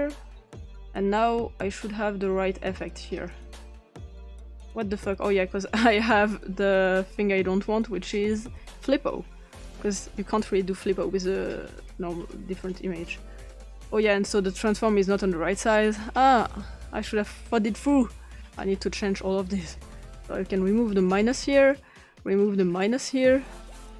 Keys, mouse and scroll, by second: 0.9-2.6 drag, 3.1 click, 4.7 click, 5.5 click, 7.4-8.5 drag, 8.9 click, 10.4 click, 12.3 click, 13.5 click, 14.4 click, 16.3 click, 19.2 click, 21.1 BackSpace, 21.5 click, 22.3 click, 22.7 BackSpace, 23.8 click.